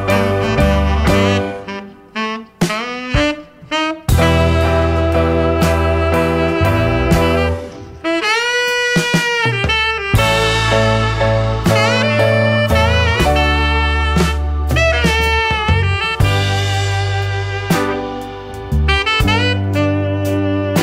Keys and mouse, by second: 8.2 click, 9.5-10.1 drag, 13.2-16.1 drag, 16.2 click.